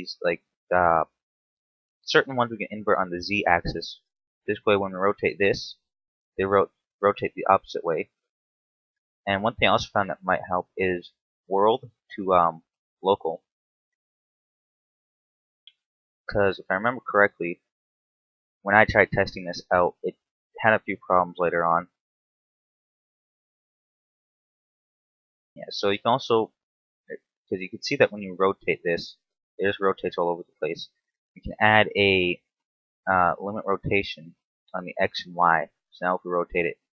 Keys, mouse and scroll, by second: 0.3 click, 2.6 right click, 3.6 click, 4.7 right click, 5.4 r, 7.2 click, 8.1 ctrl+z, 8.9 right click, 11.1 click, 13.8 right click, 14.8 click, 16.5 right click, 17.6 click, 20.0 right click, 20.3 scroll down 2, 20.6 middle click, 21.4 scroll up 2, 22.0 r, 24.5 right click, 25.1-25.6 scroll down 2, 25.6-26.2 scroll up 3, 26.8 click, 27.8 right click, 28.4 r, 29.9 right click, 30.6 click, 34.4 click, 35.0 click, 35.9 r.